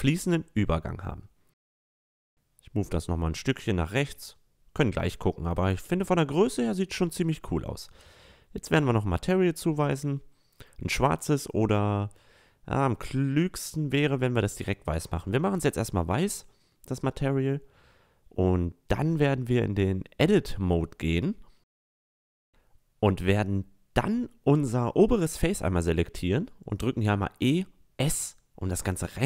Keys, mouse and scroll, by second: 1.7 click, 2.7 middle drag, 3.0-3.5 drag, 3.5-3.9 middle drag, 4.7-5.3 middle drag, 5.5-6.7 middle drag, 6.7-9.6 drag, 9.6 middle click, 11.6 middle click, 12.3-13.3 middle drag, 13.6 middle click, 14.5-16.1 drag, 16.1 middle click, 16.9-18.8 middle drag, 18.9-19.9 middle drag, 20.5-23.4 middle drag, 23.4 Tab, 24.2 right click, 25.3 e, 26.0 s.